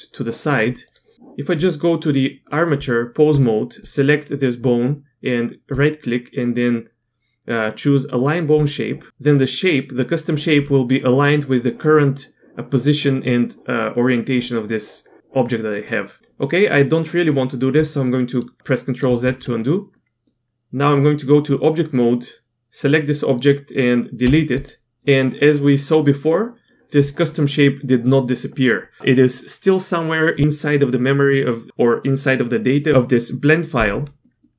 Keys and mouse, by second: 0.8 click, 1.1 Tab, 2.7 Tab, 3.8 click, 5.7-8.6 drag, 19.0 ctrl+z, 19.9 middle click, 20.5 Tab, 24.2 x, 34.2 middle click.